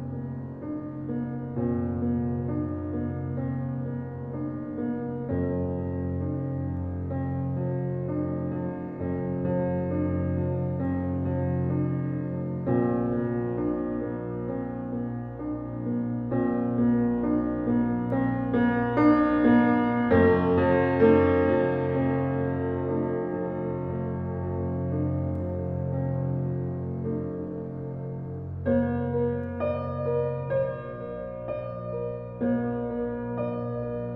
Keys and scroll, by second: 8.1 l, 27.2 l.